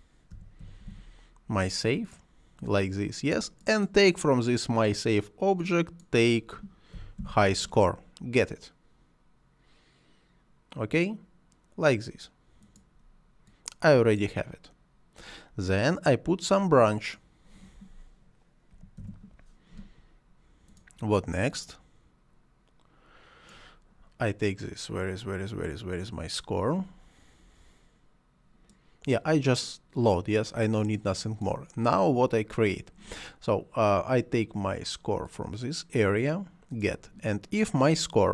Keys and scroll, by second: 0.0-1.8 typing, 6.5-7.5 typing, 18.9 f.